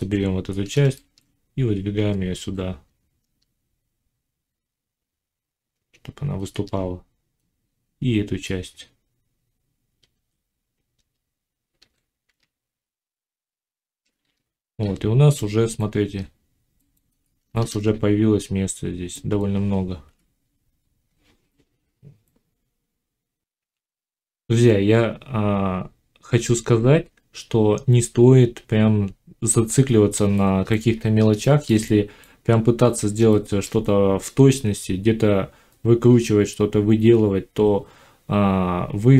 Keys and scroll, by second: 1.8 g, 2.3 y, 10.0 g, 14.1 z, 15.7 Tab, 19.9 5, 23.5 F9.